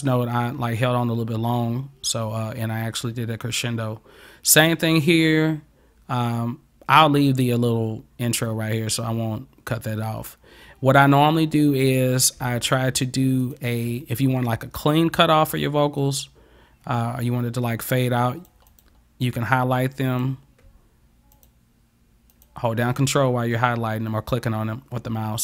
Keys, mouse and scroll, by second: 11.9 click, 12.7 ctrl+click, 13.5 ctrl+click, 16.1-18.5 drag, 18.7 click, 20.1 click, 21.4 ctrl+click, 22.3 ctrl+click.